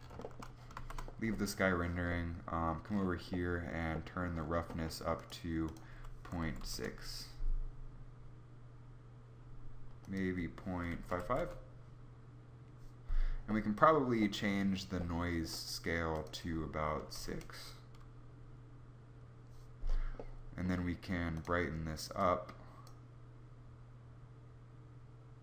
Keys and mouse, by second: 0.6 shift+z, 3.4 Escape, 3.4 shift+z, 3.4 KP_0, 11.0 5.